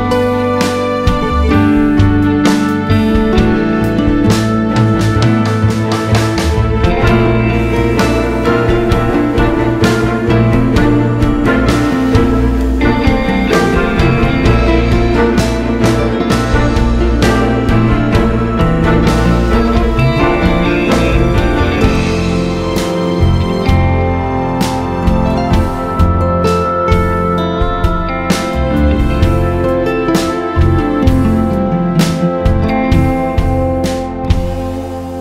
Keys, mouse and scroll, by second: 1.2-6.0 drag, 9.2-22.9 drag, 11.0 scroll down 1, 13.8 scroll down 1, 14.6 scroll up 1, 22.8 scroll up 1, 23.3-24.6 drag, 24.8-26.1 drag, 27.1 click, 28.8-35.2 drag, 32.0 scroll down 2, 32.2-33.3 scroll up 2, 33.3-34.3 scroll up 1, 34.3-34.9 scroll up 1, 34.9-35.2 scroll up 1.